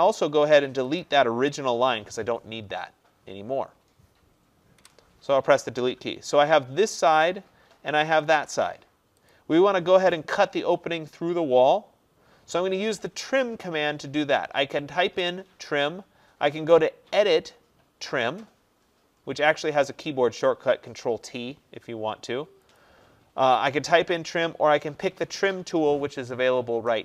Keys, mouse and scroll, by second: 4.9 Delete, 7.2 click, 8.3 click, 9.4 click, 16.8 click, 20.9 click, 22.8-27.0 drag.